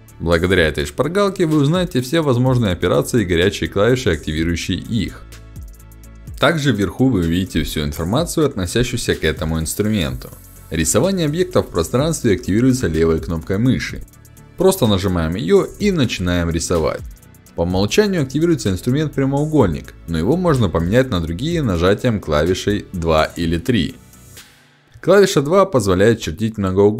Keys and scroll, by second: 21.0 2.